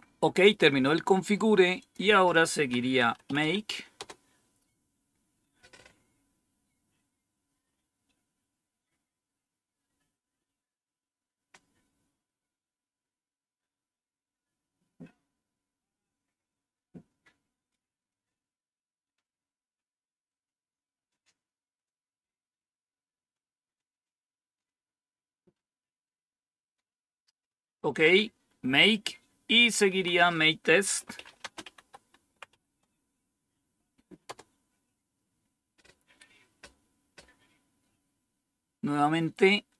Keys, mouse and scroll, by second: 1.7 click, 2.6-3.8 typing, 3.8 Return, 8.3-8.9 scroll down 2, 8.9-11.9 scroll down 1, 11.9-27.5 scroll down 1, 27.5 click, 29.8 Down, 30.5-32.9 typing, 34.1 Return.